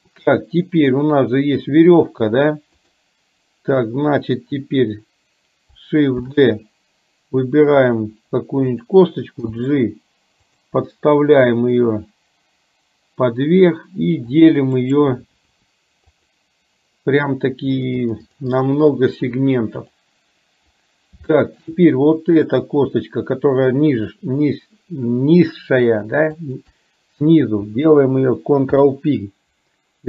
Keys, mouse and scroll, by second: 3.0 click, 6.4 shift+d, 9.5 g, 14.3 click, 14.9-16.4 right drag, 18.2 click, 18.5 click, 18.8 click, 19.3 click, 19.9 click, 21.4 shift+middle click, 22.7 click, 26.4 shift+click, 28.7 ctrl+p.